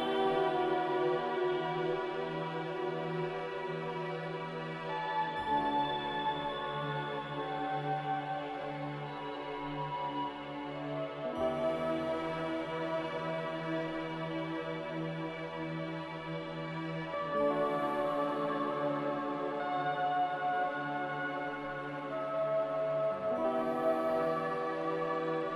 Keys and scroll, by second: 4.0 a, 14.8 a, 18.2 ctrl+c, 18.4 ctrl+v, 19.3 `, 21.1 a, 24.8 ctrl+c, 25.0 ctrl+v.